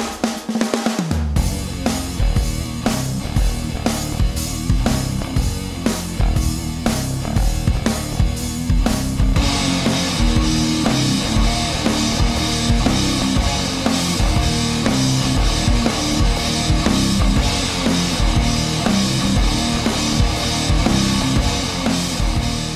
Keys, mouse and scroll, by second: 2.3-8.1 middle drag, 8.3 scroll up 1, 9.1-9.8 middle drag, 10.3 a, 10.6-12.0 middle drag, 12.6 click, 13.1 middle click, 14.0 Tab, 14.3-18.0 middle drag, 20.0 Tab, 20.5-20.9 middle drag, 20.9 click, 21.9 Tab, 22.3 middle click.